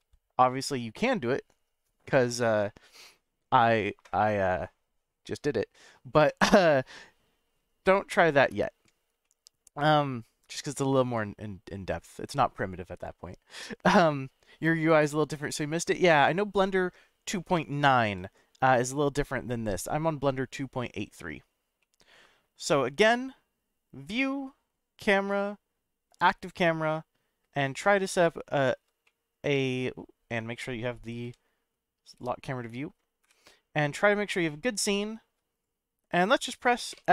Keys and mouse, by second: 9.2-10.4 middle drag, 12.0-13.0 middle drag, 18.0 n, 21.8-22.9 middle drag, 24.2-26.2 drag, 27.6-28.8 shift+middle drag, 29.0 middle click, 31.2 n, 32.1 click, 33.2 KP_0, 34.5-35.3 shift+middle drag, 37.0 F12.